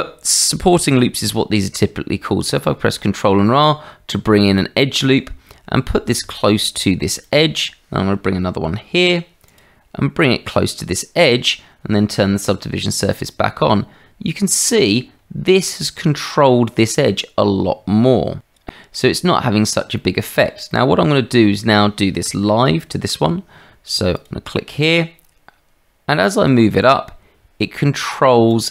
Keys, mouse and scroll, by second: 2.4 ctrl+r, 8.7 ctrl+r, 13.0 click, 15.5 shift+middle click, 18.9 click, 20.0 shift+middle click, 20.7 middle click, 22.9 ctrl+r.